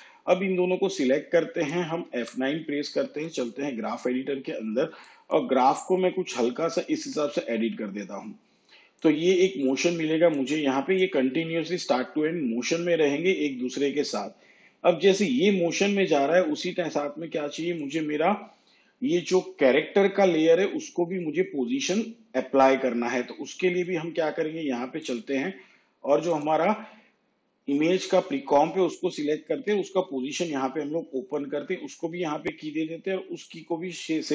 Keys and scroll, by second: 2.2 F9, 29.6 p.